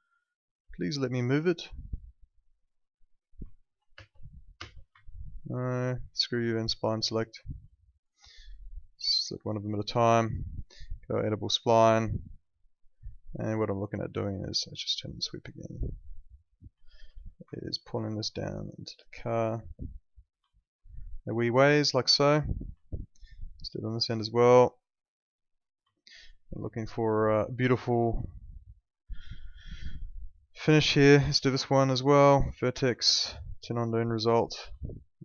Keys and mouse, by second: 1.7 click, 3.5 alt+middle click, 3.9 space, 5.0 alt+middle click, 6.1 click, 7.7 alt+middle click, 8.5 click, 12.5 alt+middle click, 13.1 click, 13.7 alt+middle click, 15.0 click, 16.7 alt+middle click, 17.1 w, 17.5 alt+middle click, 18.3 click, 20.4 alt+middle click, 22.8 alt+middle click, 23.3 click, 25.9 alt+middle click, 29.4 click, 34.8 alt+middle click.